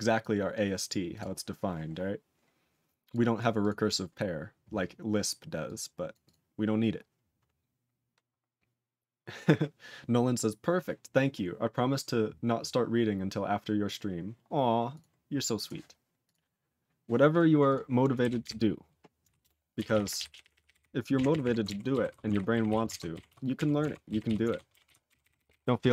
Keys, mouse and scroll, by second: 16.3 ctrl+s, 17.3 click, 17.3 click, 17.7 click, 17.7 click, 19.4 ctrl+Return, 19.9 ctrl+s, 20.0 ctrl+p, 20.2-20.6 ctrl+p, 20.7 ctrl+b, 21.1 ctrl+f, 21.3 ctrl+f, 21.4 ctrl+f, 22.1 ctrl+s, 22.3 ctrl+alt+b, 22.7 ctrl+s, 22.9 ctrl+alt+f, 23.3 ctrl+s, 23.6 ctrl+f, 24.3 ctrl+s, 24.5 ctrl+alt+b, 24.9 ctrl+s, 25.1 ctrl+n, 25.3 ctrl+n, 25.4 ctrl+n, 25.5 ctrl+n, 25.6 ctrl+n, 25.8 ctrl+n.